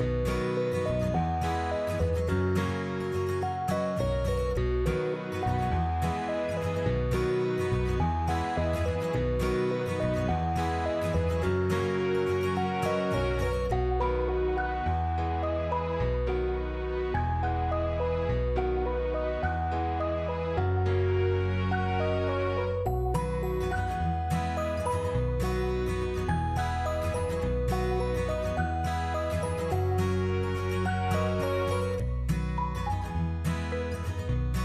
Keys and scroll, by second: 8.9 8, 9.2 0, 9.8 Return, 15.2 ctrl+v, 16.6 ctrl+v, 23.9 3, 24.2 Tab, 24.3 1, 24.9 Return, 26.8-29.7 typing, 33.5 Up.